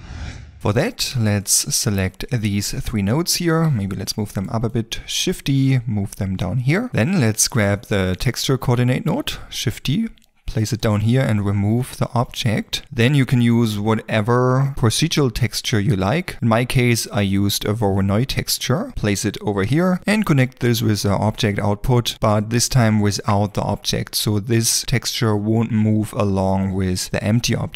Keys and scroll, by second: 3.7 g, 5.3 shift+d, 9.1 shift+d.